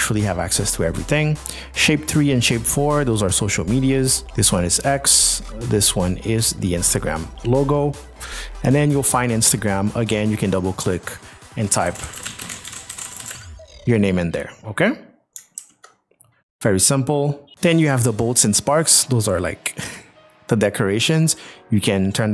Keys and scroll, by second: 11.8-13.3 typing, 14.7 p, 15.4 ctrl+p.